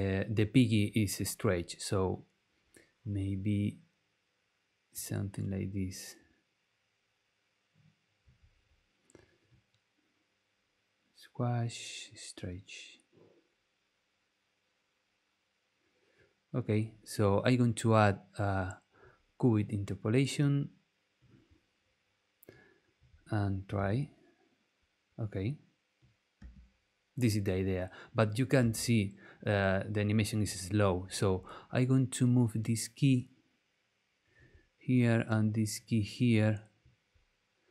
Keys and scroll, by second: 23.7 space, 26.4 space, 28.6 space.